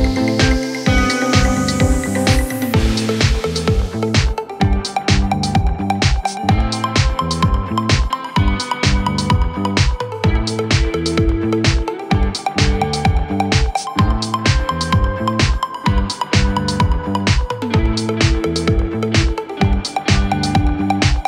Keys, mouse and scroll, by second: 9.5 scroll up 3, 9.6 click, 9.7 middle click, 10.5-11.2 scroll down 11, 11.2 Tab, 11.7 click, 12.1 g, 12.7 scroll up 2, 13.0 scroll down 2, 13.1 middle click, 13.4 scroll up 1, 13.5 middle click, 13.8 scroll down 1, 14.0 scroll up 1, 14.1 middle click, 14.5 click, 14.7 g, 15.4 click, 15.5 g, 16.0 scroll up 1, 16.0 middle click, 16.2 scroll down 2, 16.4 click, 16.5 g, 17.2 scroll up 2, 17.4-18.4 middle drag, 18.4 scroll up 2, 18.5-18.8 scroll down 6, 18.8 click, 19.0 middle click, 19.3 g, 19.7 scroll up 2, 19.9 scroll down 1, 20.0 click, 20.2 g, 20.7 click, 20.8 scroll up 3, 21.0 middle click, 21.1 scroll down 2.